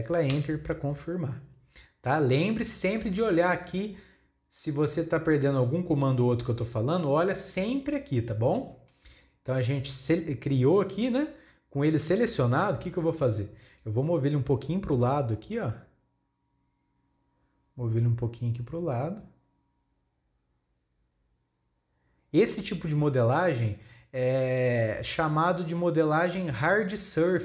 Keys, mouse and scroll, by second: 11.8 scroll down 3, 12.1 middle click, 13.1 KP_3, 13.8 scroll up 3, 14.6 scroll up 1, 15.4-18.4 drag, 22.6 scroll down 1, 23.0-25.0 shift+middle drag, 25.0-27.2 scroll up 1.